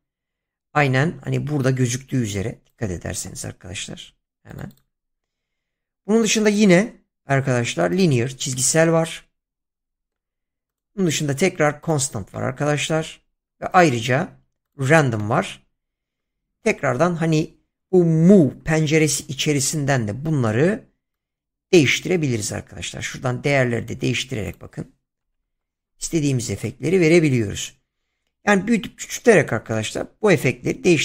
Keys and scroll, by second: 25.2 0, 25.4 Return.